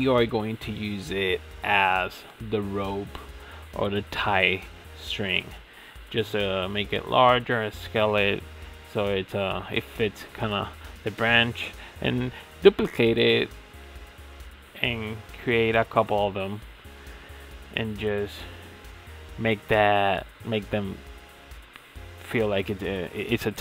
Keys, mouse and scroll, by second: 1.2 KP_1, 2.3 shift+d, 3.5 r, 4.9 s, 7.0 s, 8.6 s, 10.2 g, 13.7 Tab, 14.1-14.5 scroll down 4, 14.5-15.6 middle drag, 15.6 g, 17.7-21.2 middle drag, 21.2 Tab, 21.4-21.7 scroll up 6, 21.7-22.8 shift+middle drag, 22.8 shift+d.